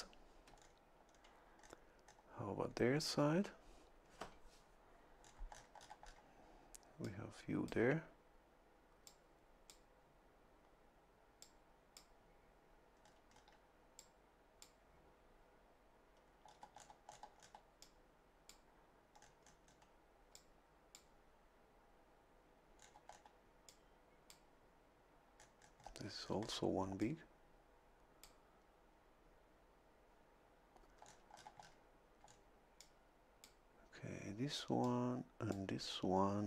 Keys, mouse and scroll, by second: 0.5 a, 0.5-1.3 scroll down 4, 1.6-2.3 scroll up 4, 2.7 scroll up 2, 5.2-6.3 scroll down 2, 7.0 click, 9.1 click, 11.4 click, 13.0-13.5 scroll up 2, 14.0 click, 16.4 scroll down 1, 17.1 scroll down 1, 17.8 click, 19.2-19.9 scroll up 1, 20.3 click, 22.8-23.4 scroll down 2, 23.7 click, 25.4-26.7 scroll up 1, 27.0-28.4 drag, 31.0 scroll down 2, 32.2 scroll down 2, 32.8 click, 34.8 click.